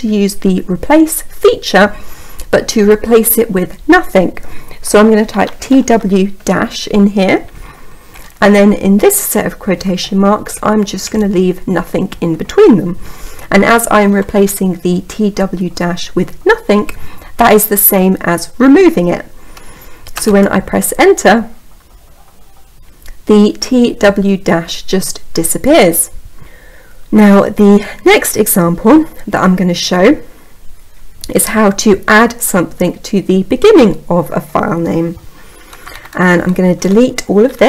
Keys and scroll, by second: 20.0 Return.